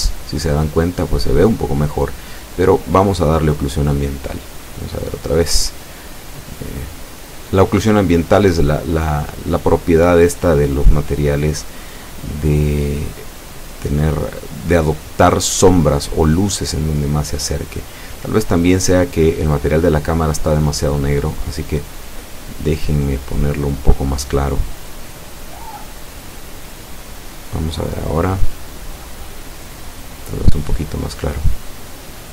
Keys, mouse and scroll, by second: 10.5 click, 11.7 Escape, 17.0 F12, 24.2 Escape, 25.0 right click, 26.5 middle click, 27.7 click, 30.9 click, 32.0 click.